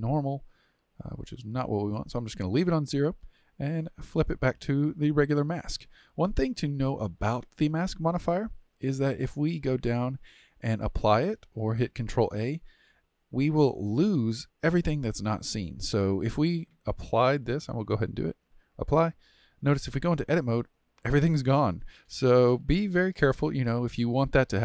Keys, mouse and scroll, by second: 3.9 click, 5.8-9.3 middle drag, 9.3-12.4 drag, 13.5-17.4 middle drag, 17.4-19.3 drag, 19.3-19.9 middle drag, 19.9 Tab, 20.4-23.5 middle drag.